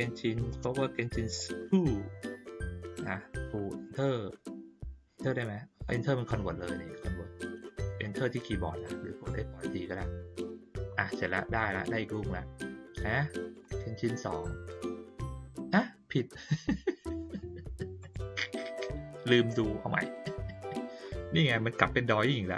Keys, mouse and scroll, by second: 11.8 click, 13.4 click, 13.6 click, 18.0 click, 20.0 click.